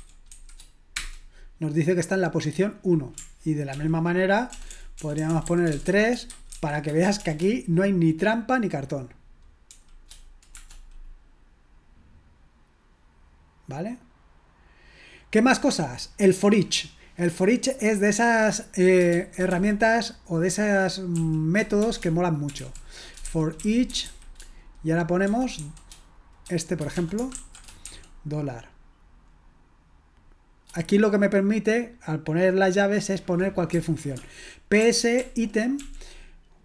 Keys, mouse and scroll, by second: 0.0-1.0 typing, 3.7 ctrl+p, 4.5-7.2 typing, 9.7 typing, 10.6 Return, 23.3-25.6 typing, 26.9-27.9 typing.